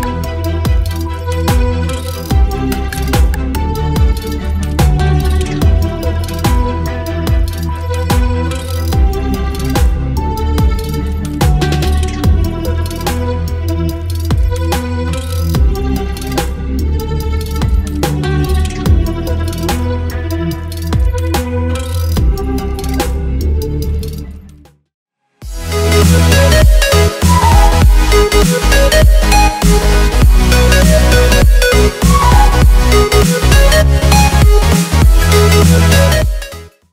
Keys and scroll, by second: 8.5 Return, 9.9 space, 12.0 space, 14.1 v, 16.2 v.